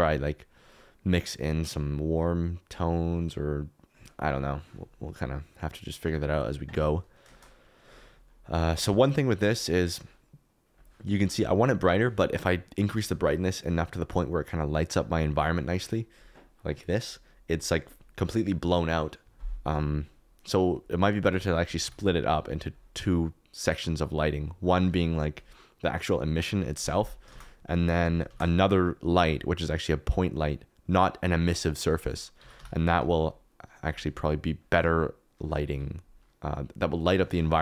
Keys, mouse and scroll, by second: 5.4 click, 7.3 shift+middle click, 8.3 KP_Decimal, 9.9 click, 13.8-16.6 drag, 21.3-22.4 drag, 23.7 click, 27.3 shift+s, 28.2 shift+a, 32.3 g, 32.5 y, 34.6 click.